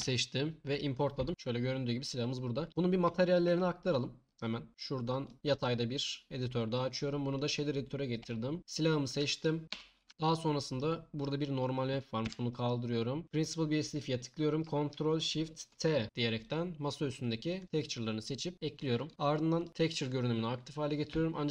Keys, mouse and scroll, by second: 3.6 shift+click, 4.7 right click, 5.5 click, 6.6 click, 7.5 click, 9.7 a, 11.2 click.